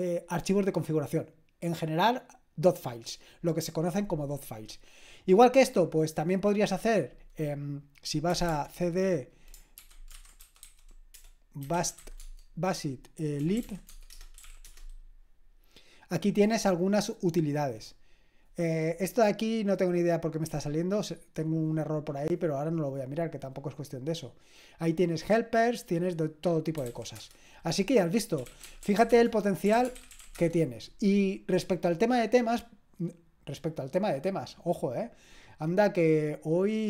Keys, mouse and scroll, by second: 7.8 click, 8.1-15.0 typing, 20.5-26.8 drag, 26.5-30.7 typing.